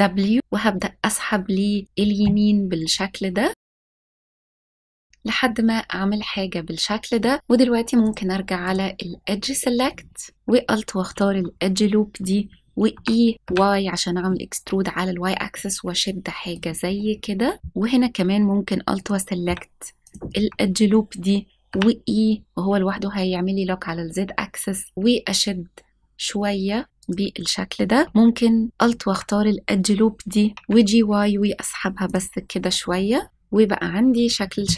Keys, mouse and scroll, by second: 3.5 shift+w, 3.6 s, 5.0-8.0 drag, 8.6 click, 9.0-9.3 scroll up 2, 10.0-10.4 scroll down 1, 11.0 alt+click, 11.0 scroll down 1, 12.8 e, 13.4 y, 16.5 click, 16.8 scroll down 1, 17.5 scroll down 2, 18.9 alt+click, 20.0 alt+click, 21.6 e, 26.9 click, 27.3-27.6 scroll up 1, 27.7 shift+middle click, 28.7 alt+click, 30.5 g, 30.5 y, 31.8 a, 32.0 click, 32.6 scroll down 1, 33.3-33.7 scroll down 2.